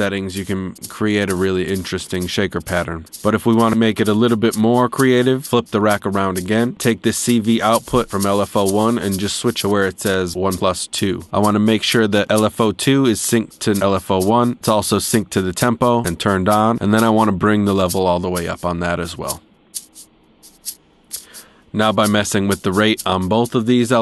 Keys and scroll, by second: 5.4 Tab, 10.8 Tab.